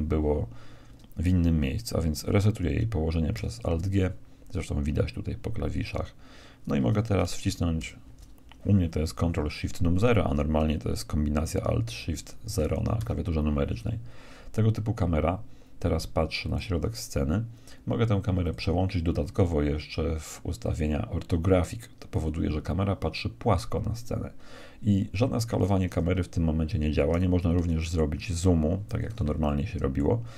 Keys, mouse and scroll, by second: 3.3 alt+g, 7.8 ctrl+shift+KP_0, 13.0 g, 18.4-20.3 drag, 22.1-24.0 drag, 24.4-27.6 middle drag, 27.6 g, 29.4 middle click.